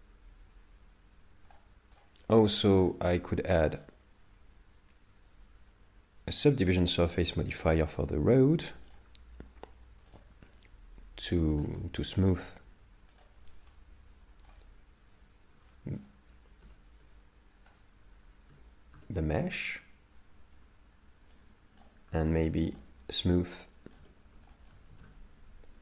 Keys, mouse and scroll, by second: 1.5 middle click, 2.8-3.7 scroll up 7, 3.7 click, 7.5-8.9 scroll down 16, 8.9 click, 10.1 click, 11.6-12.3 scroll up 6, 12.3-13.2 scroll up 6, 13.2 click, 13.7 middle click, 15.7 shift+middle click.